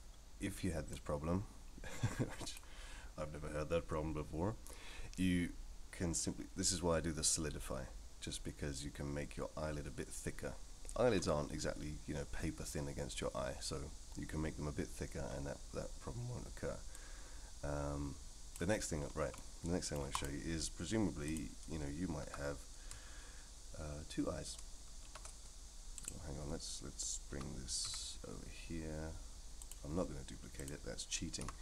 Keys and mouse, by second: 0.9-2.6 drag, 17.0-18.6 drag, 19.3-19.9 middle drag, 20.1 click, 22.2 a, 25.1 shift+d, 27.3 g, 31.4 x.